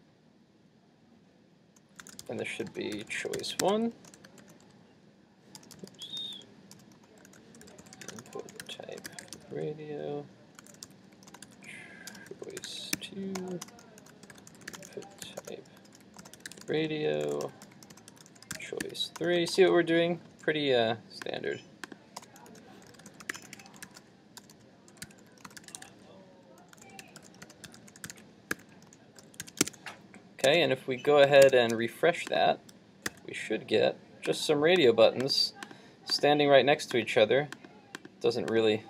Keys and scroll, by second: 29.4 super+s, 29.6 super+Tab, 31.5 super+Tab, 33.1 super+r.